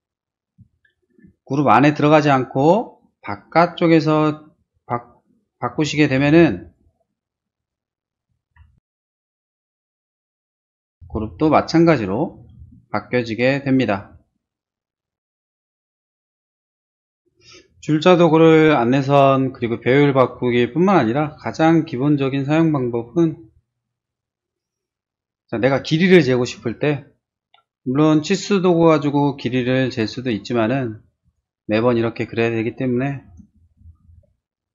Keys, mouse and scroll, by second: 0.3 scroll down 1, 0.7 shift+middle click, 1.8 click, 5.7 t, 6.6 click, 7.5 click, 8.5-9.7 typing, 9.9 Return, 10.5 Return, 11.7 middle click, 12.0 middle click, 24.0 click, 25.1-25.6 scroll down 1, 26.2 shift+middle click, 28.0 click, 29.4 click, 30.6 click, 31.2 click, 31.9 middle click, 34.4 ctrl+space.